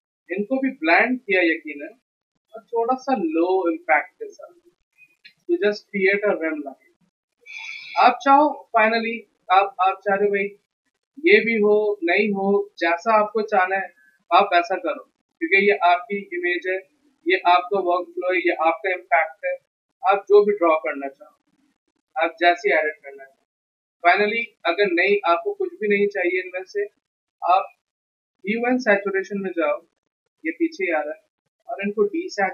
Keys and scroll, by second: 7.9 z, 10.6 z.